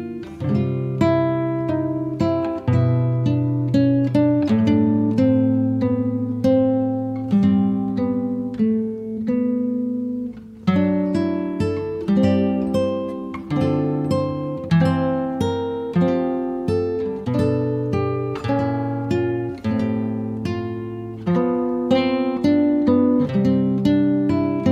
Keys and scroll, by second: 0.6 r, 3.7 space, 10.9 f, 14.0 4, 14.5 Return, 15.1 space, 17.0 p, 23.2 space, 24.5 Delete.